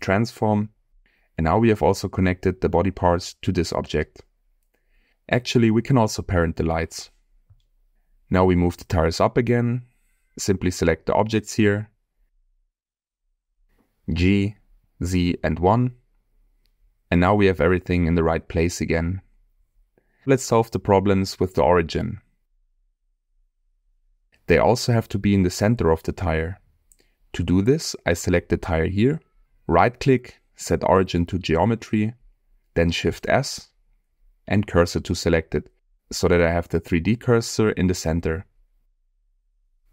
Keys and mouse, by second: 1.7-2.2 middle drag, 3.4 g, 3.7 click, 4.6 click, 5.5 middle drag, 6.6 ctrl+p, 9.5-10.2 middle drag, 11.1 click, 12.2 click, 12.7 shift+click, 13.5 ctrl+click, 14.7 z, 15.4 1, 15.9 Return, 16.8-17.3 middle drag, 18.1-19.6 drag, 24.8 middle click, 25.2 middle click, 25.9 shift+middle click, 28.9 middle click, 29.7-31.6 right drag, 33.7 shift+s, 36.4-36.9 middle drag, 38.5 click, 39.5 shift+click.